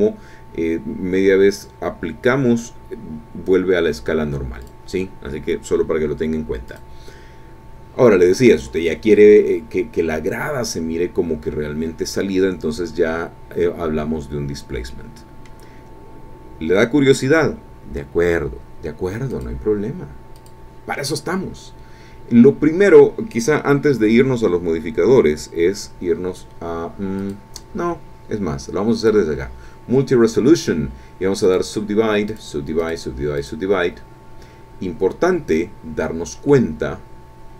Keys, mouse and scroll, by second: 4.6 click, 6.7 click, 7.6 scroll down 1, 8.2 click, 8.3 scroll down 1, 10.3-10.7 scroll down 2, 10.7-14.6 scroll up 2, 14.9 click, 19.3 click, 20.3 click, 27.2 click, 29.0 click, 31.4 click, 32.3 click, 32.8 click, 33.4 click, 36.5-37.5 middle drag.